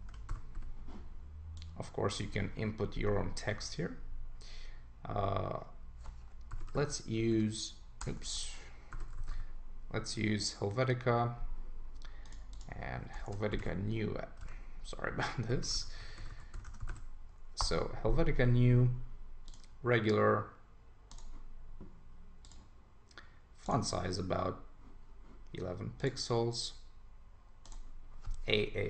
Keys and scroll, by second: 0.0 super+Return, 10.1 Right, 17.6 Return.